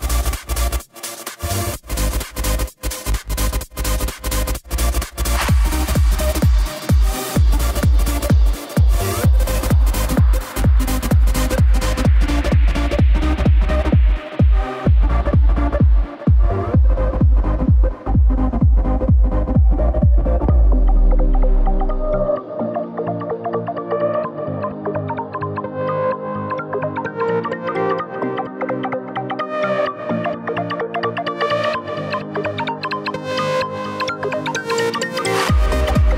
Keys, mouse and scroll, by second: 3.7 Tab, 4.0 click, 4.3-5.7 middle drag, 5.7 click, 6.0-7.2 scroll down 2, 8.3 scroll down 1, 8.5-9.6 shift+middle drag, 10.8 click, 11.9-12.5 scroll up 4, 13.2-16.0 drag, 17.9-18.3 drag, 18.5 scroll down 2, 18.8-20.6 middle drag, 20.6 click, 21.1 KP_1, 22.5 s, 24.6-27.0 drag, 27.3-27.9 middle drag, 27.9 click, 29.3 scroll up 1, 29.5-30.3 middle drag, 30.3 scroll up 2, 30.8 Tab, 31.4 Tab, 31.8 click, 32.0 scroll down 3, 32.2-32.9 middle drag, 32.9 click, 33.3 KP_1, 33.9-34.5 scroll down 1, 34.5 click.